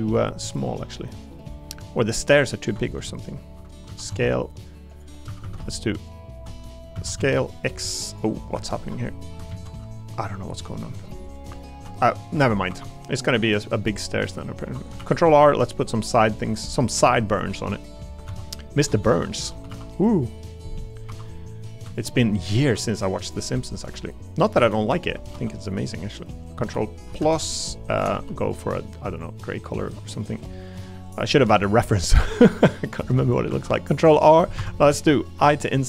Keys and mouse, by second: 1.0 middle click, 1.3 middle click, 3.1 alt+shift+click, 3.9 s, 4.1 x, 5.2 a, 5.4 a, 5.9 alt+click, 6.9 s, 7.2 x, 8.8 ctrl+KP_Add, 9.5 ctrl+z, 10.3 middle click, 12.3 a, 13.0 3, 13.6 middle click, 14.4 middle click, 14.6 3, 15.0 ctrl+r, 16.5 click, 16.7 middle click, 16.8 click, 17.0 ctrl+r, 18.3 ctrl+z, 19.0 Escape, 19.7 ctrl+r, 20.9 click, 21.0 3, 22.3 ctrl+click, 23.5 middle click, 24.9 ctrl+click, 25.3 e, 27.1 ctrl+KP_Add, 27.9 a, 28.1 g, 29.1 click, 29.8 middle click, 30.5 middle click, 32.8 middle click, 33.5 ctrl+r, 35.4 i.